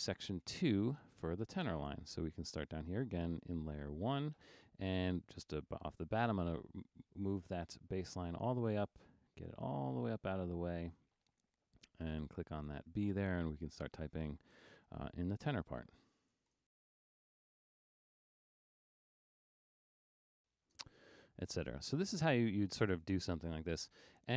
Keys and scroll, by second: 16.4-20.6 typing.